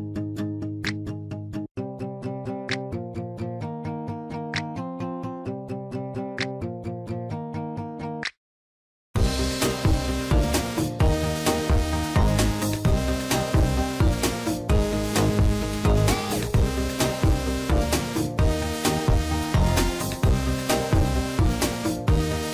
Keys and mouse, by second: 1.7 shift+middle click, 4.1 shift+middle click, 4.9 shift+middle click, 6.9 shift+middle click, 8.6 shift+middle click, 10.2 shift+middle click, 11.2 click, 11.7 shift+middle click, 14.8-19.7 drag, 20.7 shift+middle click, 21.8 click, 22.2 click.